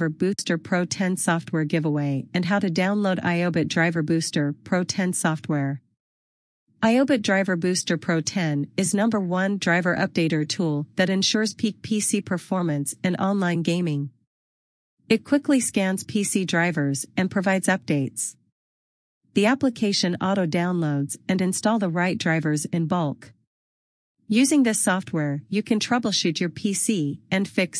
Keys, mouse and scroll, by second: 2.5 click, 11.9 click, 17.3 click.